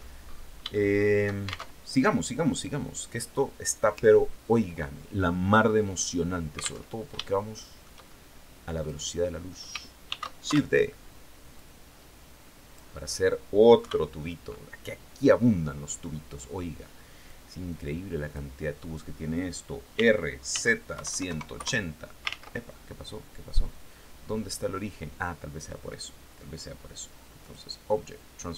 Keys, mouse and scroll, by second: 0.2 shift+middle click, 1.2 alt+shift+Tab, 6.3 alt+Tab, 6.7 alt+shift+click, 8.3 right click, 9.5 shift+d, 9.9 shift+Return, 11.0-12.4 drag, 13.2 KP_3, 16.7-18.0 drag, 19.4-20.7 typing, 21.0 KP_Enter, 21.7 ctrl+z, 26.9 click.